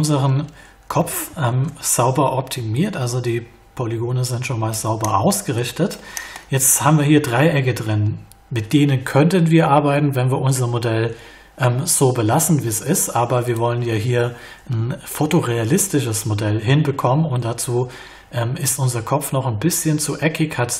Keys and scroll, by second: 1.5 ctrl+a, 17.4 alt+y.